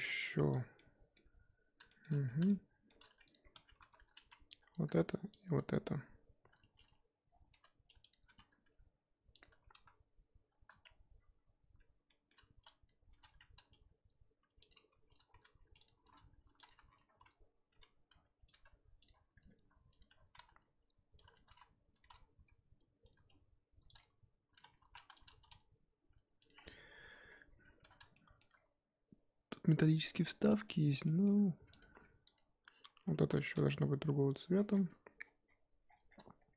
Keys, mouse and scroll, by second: 0.8-2.1 shift+middle drag, 2.1 scroll up 4, 2.5 shift+middle click, 3.3 click, 3.4 scroll up 1, 3.5 Tab, 4.3 z, 4.7 click, 5.6 shift+click, 7.7 g, 9.5 Tab, 9.8 z, 10.6 Tab, 10.9 a, 12.9 click, 13.1 s, 17.0 s, 18.5 Tab, 19.0 click, 20.0 click, 20.1 Tab, 20.3 a, 21.3 click, 22.0 s, 24.8 ctrl+z, 25.3 s, 26.6-27.5 scroll down 14, 27.8 Tab, 28.1-28.5 shift+middle drag, 28.5-30.7 scroll up 1, 30.7 shift+middle click, 31.4-31.7 scroll up 2, 31.7 click, 31.9 Tab, 32.3 click, 32.8-33.3 scroll up 2, 33.3 z, 33.8 click, 35.8 scroll down 13.